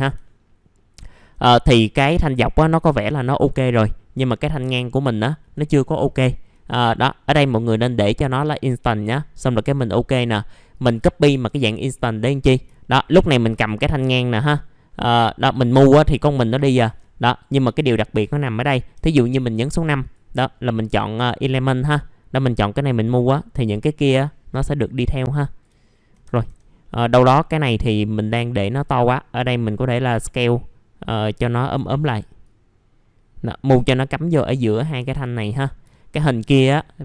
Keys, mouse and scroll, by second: 0.2 alt+middle click, 1.4 middle click, 1.8 alt+middle click, 3.3 alt+middle click, 5.8 middle click, 6.2 alt+middle click, 7.7 click, 11.4 F4, 11.9 click, 12.4 middle click, 12.8 alt+middle click, 13.5 alt+middle click, 14.2-16.0 scroll up 1, 16.0 click, 17.6 click, 19.6 click, 20.5-21.4 scroll up 1, 23.0-25.7 drag, 25.8 alt+middle click, 27.0 scroll down 1, 28.3-31.7 drag, 31.7 w, 32.4-34.9 drag, 34.9 F4, 35.5 middle click, 35.7 scroll down 1, 35.9 alt+middle click.